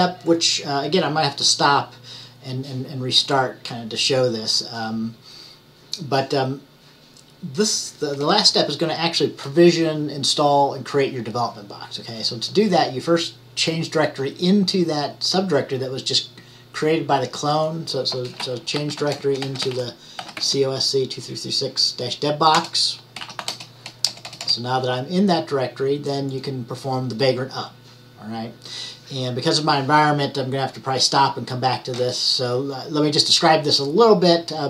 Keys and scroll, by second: 18.6-20.8 typing, 23.0-24.0 typing.